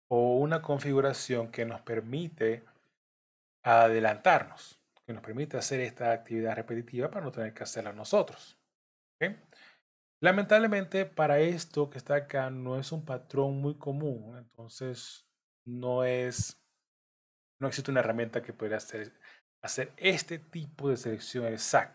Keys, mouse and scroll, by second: 2.7 shift+click, 4.1 shift+click, 10.1 middle click, 13.4 shift+click, 17.1 middle click, 18.1 scroll down 2, 19.0 middle click, 19.0-19.4 scroll down 2, 21.7 shift+click.